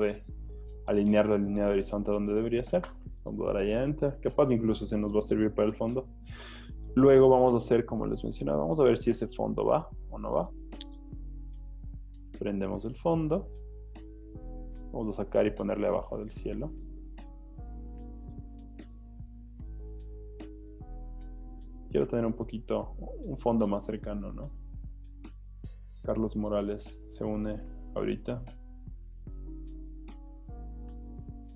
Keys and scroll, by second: 2.9 Return, 18.8 v.